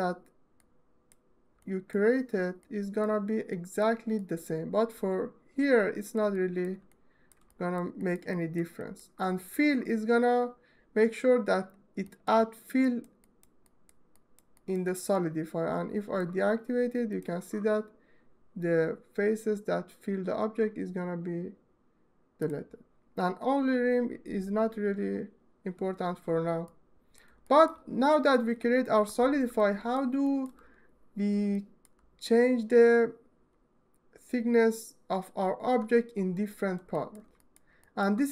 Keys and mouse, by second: 0.1 click, 1.3 click, 2.4 alt+click, 2.5 alt+middle click, 2.7 alt+middle click, 4.3 middle click, 4.9-6.9 ctrl+right drag, 7.2 alt+middle click, 8.4 alt+middle click, 8.9 alt+shift+middle click, 9.2 alt+middle click, 14.3 middle click, 14.6 middle click, 14.8-15.9 ctrl+middle drag, 22.1-26.0 middle drag, 26.7 alt+middle click, 26.9 alt+shift+middle drag, 28.1-29.1 middle drag, 36.5 alt+shift+middle click, 37.7 alt+middle click.